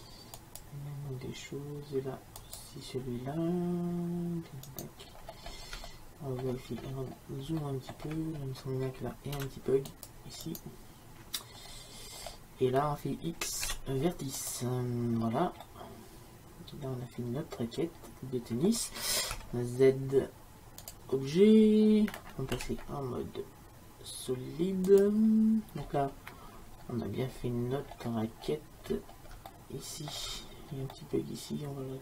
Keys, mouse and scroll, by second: 5.2 middle click, 6.9-9.6 middle drag, 9.4 c, 11.7-13.0 middle drag, 13.8 x, 19.4 Tab, 21.7-23.0 drag, 22.6 z, 23.0-25.0 middle drag, 26.0 middle click, 27.6-29.6 middle drag.